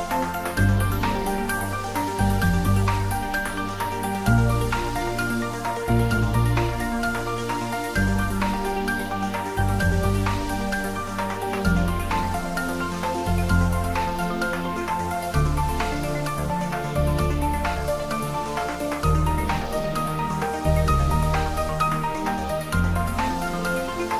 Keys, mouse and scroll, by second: 0.1 ctrl+r, 1.5 click, 4.0 ctrl+r, 5.0 click, 7.0 ctrl+r, 7.7 click, 9.7 ctrl+r, 11.2 click, 13.4 ctrl+r, 14.6 click, 16.2 ctrl+r, 16.9 click, 19.3 click, 20.0 scroll down 1, 20.9 Tab, 21.8-22.8 scroll down 1, 22.8-24.1 middle drag.